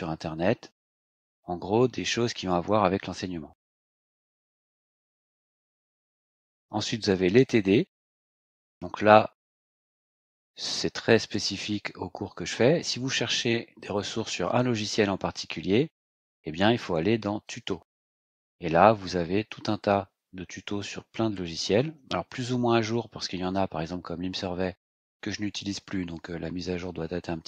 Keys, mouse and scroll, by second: 5.7 click, 7.3 click, 10.8-11.6 scroll down 4, 15.9 click, 17.4 click, 18.5 scroll down 2, 20.6-21.0 scroll down 1, 21.4 scroll down 2.